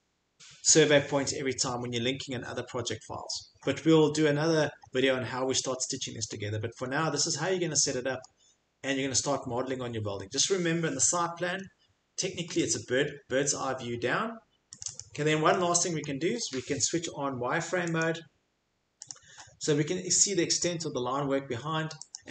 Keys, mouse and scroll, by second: 6.3-6.9 scroll, 7.4-8.2 scroll, 8.2-9.2 scroll, 9.2 click, 11.4 Escape, 12.0 middle click, 12.4 middle click, 12.7 middle click, 14.8 click, 15.0 click, 16.0 middle click, 18.0 click, 19.1 click, 19.8 middle click, 19.9 middle click, 20.0 middle click, 20.3 middle click, 22.1 click, 22.1 middle click.